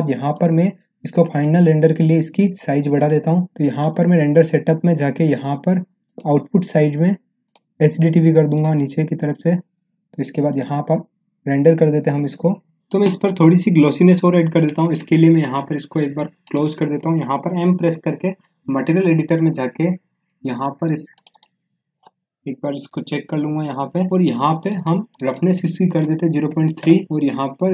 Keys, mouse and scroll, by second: 0.3 click, 6.0 click, 16.4 click, 17.6 m, 21.1 click, 24.5 click.